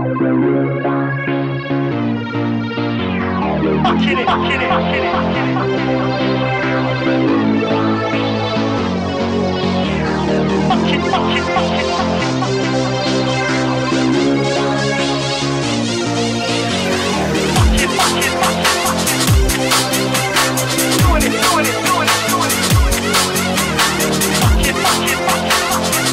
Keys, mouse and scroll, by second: 0.0-13.2 typing, 15.0 typing, 22.1-24.8 typing.